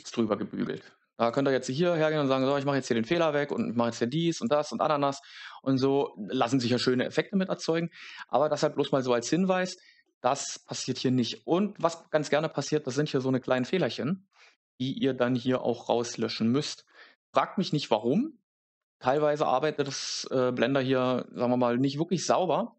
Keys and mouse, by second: 10.0 middle click, 19.0 click, 21.1 click.